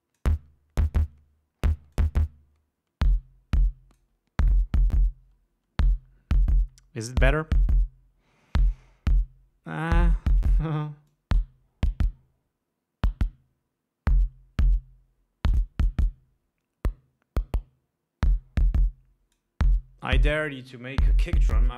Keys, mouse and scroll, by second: 2.3-4.5 drag, 11.5-19.9 drag.